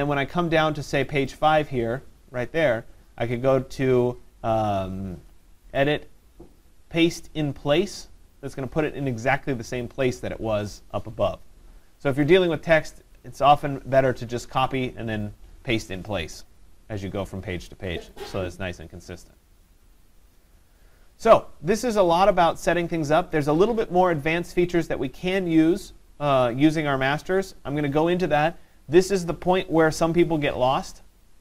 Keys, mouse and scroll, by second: 1.1 click, 1.3 click, 5.8 click, 7.3 click, 9.7 click, 18.2 click, 23.1 click.